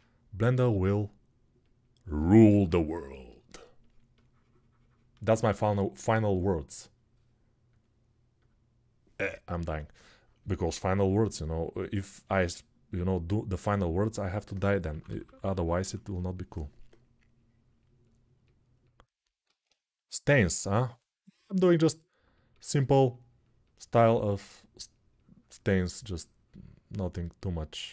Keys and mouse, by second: 2.5 ctrl+r, 11.8-27.9 right drag, 12.8-27.9 drag, 12.8-27.9 middle drag, 13.5 alt+q, 14.6 [, 14.8 [, 19.3 alt+q.